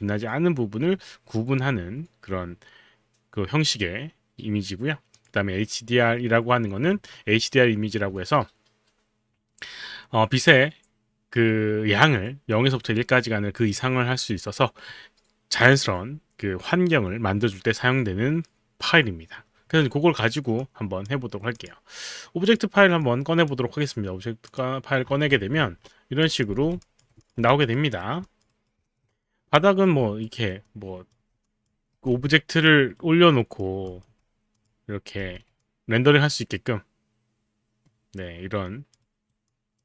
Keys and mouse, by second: 5.1 click, 20.6 click, 23.0 click, 24.5 click, 26.3 click, 26.5 f, 27.2 click, 27.5 alt+click, 30.2 alt+right click, 30.6 alt+click, 31.4 click, 31.9 f, 32.3 alt+click, 32.7 alt+right click, 33.4 alt+middle click, 33.9 alt+click, 34.6 click, 35.2 f, 35.5 alt+click, 39.1 alt+right click, 39.5 alt+click.